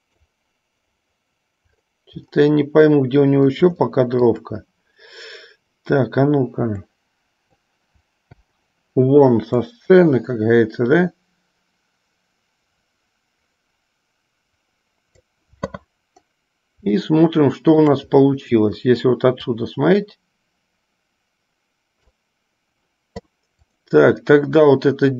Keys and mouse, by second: 4.1 shift+middle click, 7.1-8.0 drag, 8.6 i, 9.7-15.4 drag, 17.2-18.1 shift+middle drag, 19.7-22.4 drag.